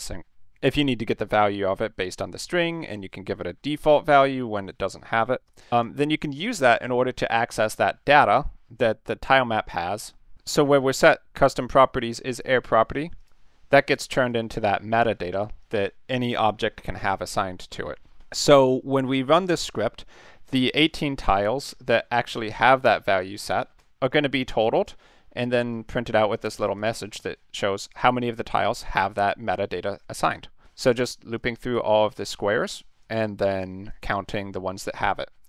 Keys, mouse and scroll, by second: 5.5 click, 13.2 click, 13.9 click, 14.3 click, 15.6 click, 23.8 click, 24.1 click, 24.8 click, 25.7 click, 26.8 click, 27.9 click, 28.5 click, 30.8 click, 31.4 click, 32.0 click, 33.0 click, 33.6 drag, 34.0 click, 34.9 click.